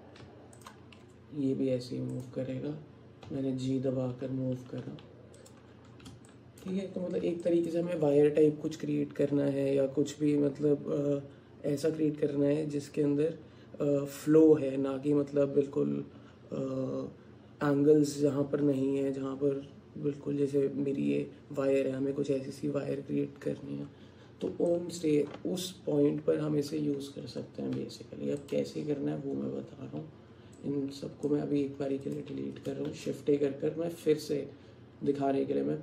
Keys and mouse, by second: 2.1 click, 3.3 g, 6.3 shift+click, 7.5 alt+shift+click, 24.8 alt+click, 27.8 Tab, 30.6 click, 31.6 x, 32.9 shift+a.